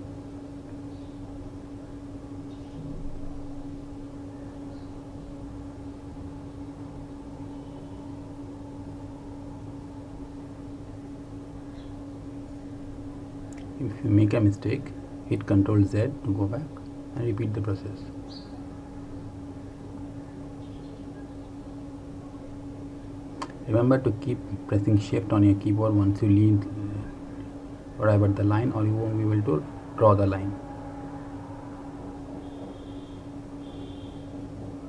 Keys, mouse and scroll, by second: 1.1 click, 5.3 shift+click, 11.3 ctrl+z, 14.0 shift+click, 19.0 shift+click, 25.0 shift+click, 29.9 shift+click, 34.2 shift+click.